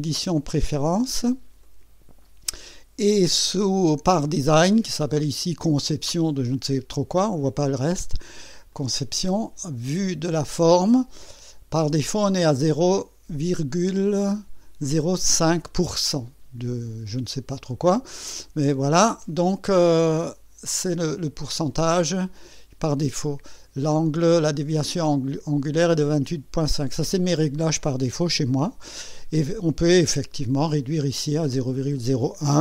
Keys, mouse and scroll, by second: 1.6 click, 8.7 click, 10.3 click.